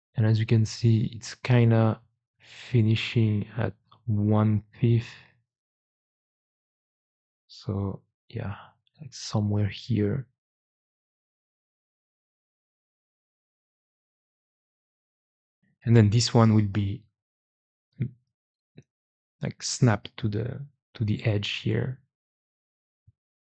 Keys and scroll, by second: 6.8 g, 7.4 Escape, 8.0 g, 16.4 2, 17.1 g.